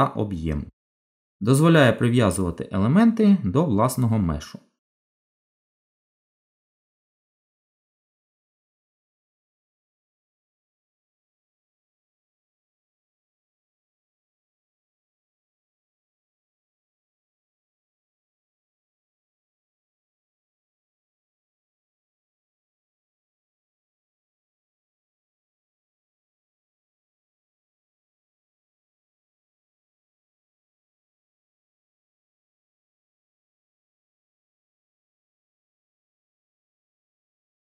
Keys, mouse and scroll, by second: 3.0 g, 13.7 ctrl+z, 14.7 z, 18.3 g, 28.1 ctrl+z, 29.9 click, 35.1 g.